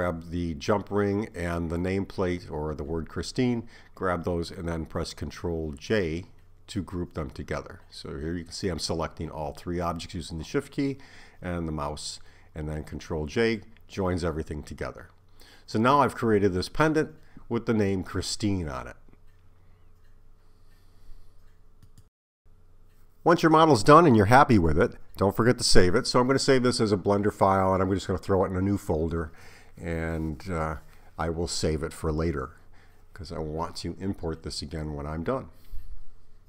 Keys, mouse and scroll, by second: 6.4 shift+click, 7.6 shift+click, 9.7 ctrl+j, 20.0 click.